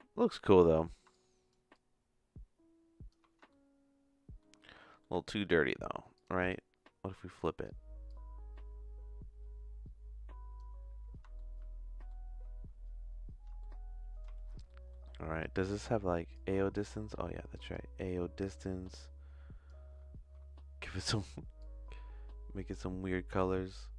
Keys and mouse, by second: 0.2 middle click, 1.1 shift+click, 1.7-3.1 shift+drag, 3.5 shift+middle click, 4.8 middle click, 5.3 middle click, 6.2 click, 7.4 click, 8.0-10.6 drag, 11.3 shift+middle click, 13.6 shift+middle click, 14.6 middle click, 16.3-17.7 drag, 18.4 click.